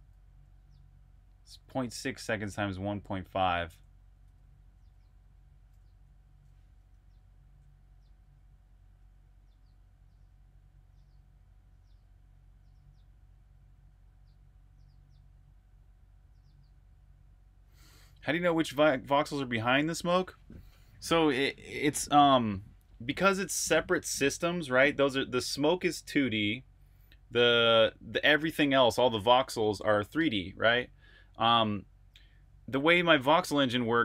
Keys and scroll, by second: 0.0-0.4 typing, 3.2-4.5 typing, 7.2 super+Tab.